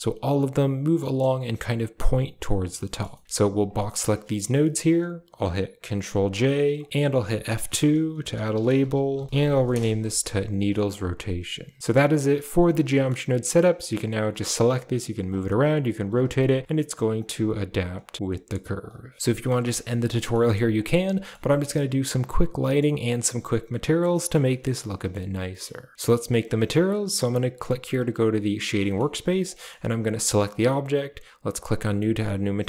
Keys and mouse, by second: 0.9 shift+middle drag, 2.6 middle drag, 3.0 shift+middle drag, 3.2 middle click, 3.5-4.2 drag, 4.3 g, 5.9 ctrl+j, 6.7 click, 7.2 F2, 8.8 e, 9.9 a, 10.5 click, 11.0 click, 11.8 s, 11.8 a, 12.0 middle click, 12.5 click, 12.7 Tab, 12.9 middle click, 13.1 a, 13.6 click, 14.2 g, 15.2 click, 15.5-17.9 typing, 18.9-21.2 typing, 19.2 Tab, 19.3 middle drag, 19.5 shift+middle click, 20.2 middle drag, 20.6 click, 21.1 shift+middle click, 22.5 middle click, 24.2 middle click, 24.4 middle drag, 24.9 middle click, 25.5 middle click, 25.8 middle click, 25.9 ctrl+s, 29.5 shift+middle click, 30.0 click, 31.5 click.